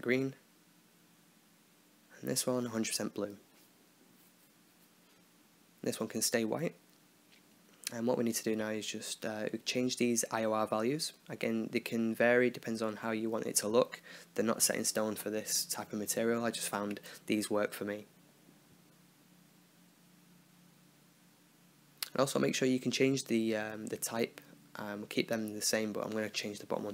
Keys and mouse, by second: 2.4-3.4 drag, 5.0 middle click, 5.7-6.7 drag, 8.1 middle click, 9.1-10.2 drag, 12.5 click, 14.4-15.4 drag, 15.4 BackSpace, 18.6-19.9 middle drag, 21.8-23.5 drag, 25.7 shift+a.